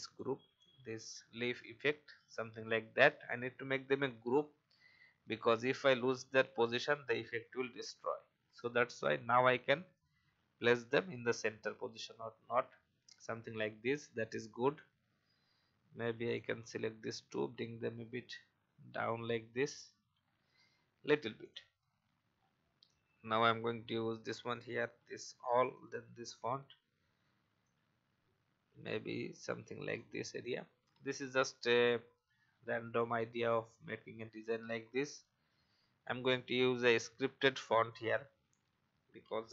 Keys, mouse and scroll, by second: 0.0 shift+click, 5.1 alt+scroll down 1, 6.1-7.4 drag, 13.1 alt+scroll down 1, 14.4 click, 16.2 shift+click, 17.3 shift+Down, 19.7 Up, 20.1 Up, 20.3 Up, 21.4 click, 21.8 alt+scroll down 1, 22.3-22.9 scroll down 1, 23.3-24.6 drag, 25.7 click, 26.1 typing, 26.6 alt+scroll up 1, 27.6-29.5 drag, 29.9 alt+shift+click, 31.0-31.9 alt+shift+scroll up 3, 32.4 alt+scroll down 1, 33.7-34.7 drag.